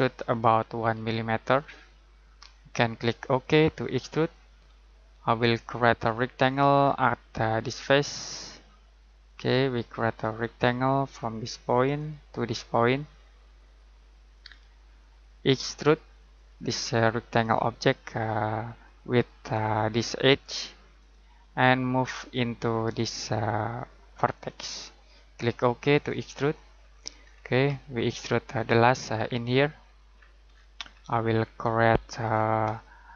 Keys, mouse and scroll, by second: 0.8 1, 1.5 click, 4.7 middle click, 6.7-7.8 scroll down 1, 7.8 click, 26.7 scroll down 1, 26.8-28.0 scroll up 1, 28.0 middle click, 30.1-31.0 scroll down 1, 31.0 middle click, 32.2-33.1 scroll down 1.